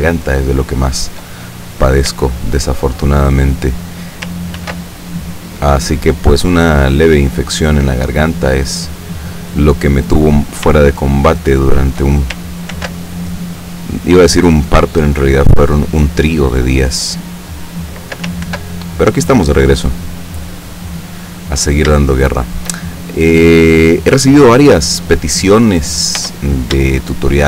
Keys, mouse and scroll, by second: 0.1-1.4 shift+middle drag, 2.4-3.5 shift+middle drag, 4.7 ctrl+r, 7.8 click, 9.0 click, 11.1-12.2 shift+middle drag, 12.9 ctrl+r, 13.7 click, 17.2 click, 18.6 ctrl+r, 19.9 click, 21.0 click, 22.1 shift+middle click, 22.9-23.9 shift+scroll down 1, 26.3 Tab, 27.1 shift+click.